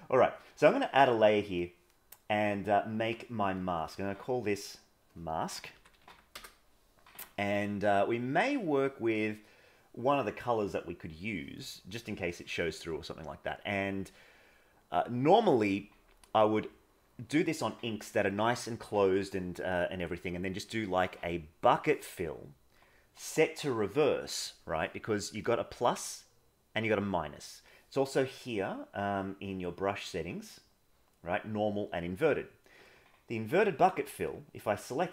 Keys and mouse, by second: 3.5 click, 4.8-6.4 drag, 14.2 middle click, 15.6 middle click, 16.9 middle click, 21.6 click.